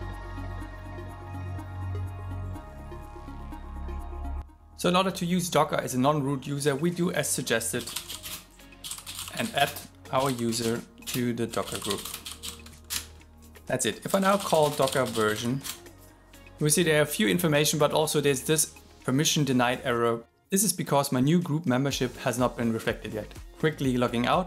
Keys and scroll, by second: 0.4 alt+7, 10.6 shift+g.